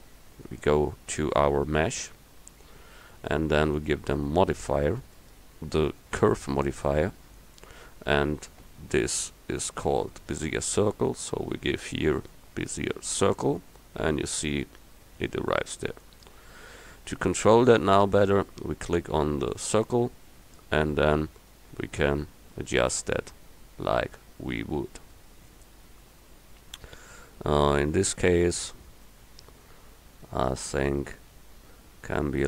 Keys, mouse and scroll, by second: 16.1 middle click, 20.2 s.